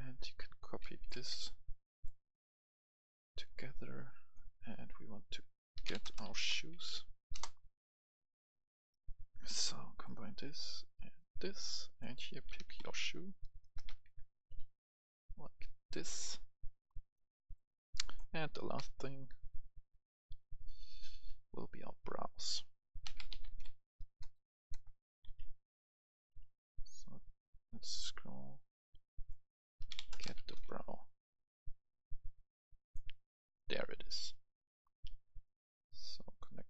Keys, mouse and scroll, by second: 0.8 ctrl+c, 1.0 click, 1.1 ctrl+v, 1.7-4.0 drag, 5.7-6.7 typing, 7.3 Return, 8.2-13.0 drag, 12.3-14.0 typing, 15.5 click, 18.8 ctrl+v, 19.4 click, 21.4 click, 23.2-24.2 typing, 25.6 typing, 26.4 scroll down 1, 27.1 scroll down 1, 28.9-31.0 drag, 29.9-30.6 typing, 31.8-35.3 drag, 36.0-36.6 drag.